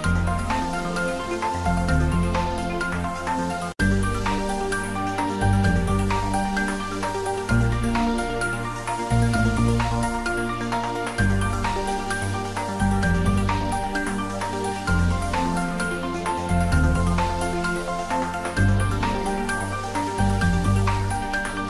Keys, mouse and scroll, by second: 0.8 click, 3.6-6.3 drag, 6.3-7.1 scroll up 1, 7.1-9.4 middle drag, 9.4 scroll down 1, 10.2-16.3 drag, 16.7 click, 19.3 click, 20.8-21.6 scroll down 1.